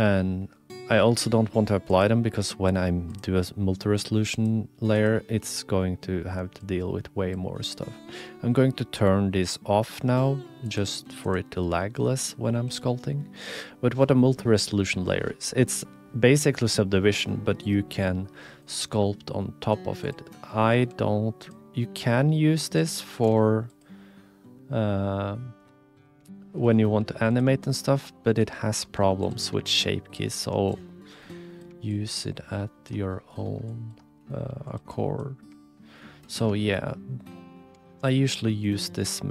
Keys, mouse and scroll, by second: 1.9-3.3 drag, 4.3 click, 4.9 click, 10.7 click, 11.2 click, 18.4 click, 20.0 click, 20.4 shift+click, 20.9 f, 22.0 click, 22.9 ctrl+z, 23.3 space, 27.0 f, 27.6 shift+click, 28.0 click, 28.6 shift+click, 28.9 f, 30.4 ctrl+z, 33.7 shift+click, 34.1 click, 34.4 f, 34.9 click, 35.6 shift+click, 35.9 click, 36.6 shift+middle click, 36.9 middle click, 37.8 shift+middle click, 38.5 middle click.